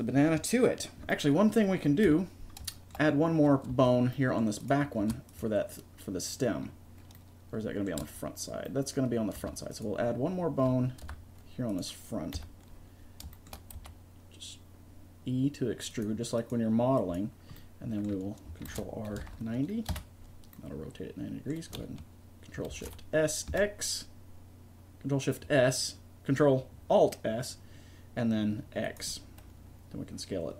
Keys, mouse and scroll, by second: 2.1 KP_3, 3.7 Tab, 5.0 Tab, 5.4 right click, 8.0 Tab, 9.4 Tab, 9.9 right click, 11.0 Tab, 12.3 KP_3, 13.8 e, 18.7 ctrl+r, 22.7 ctrl+alt+s, 29.1 middle click.